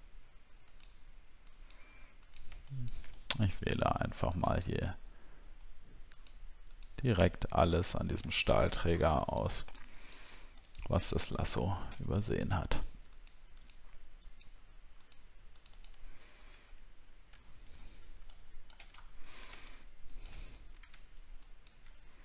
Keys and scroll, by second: 17.5 alt+scroll down 1, 18.9 alt+scroll up 6.